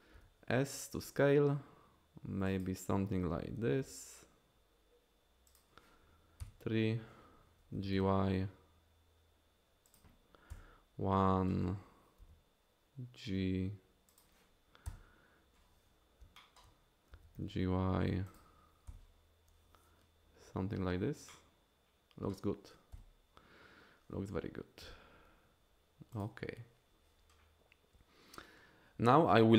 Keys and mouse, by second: 0.1 s, 2.5 click, 3.8 s, 5.5 click, 6.4 KP_3, 7.8 g, 7.9 y, 10.5 KP_1, 12.2 g, 14.2 click, 14.9 KP_3, 17.1 g, 17.4 y, 18.3 click, 18.9 KP_1, 21.9-22.4 drag, 22.9 KP_1, 24.8 g, 26.2 click.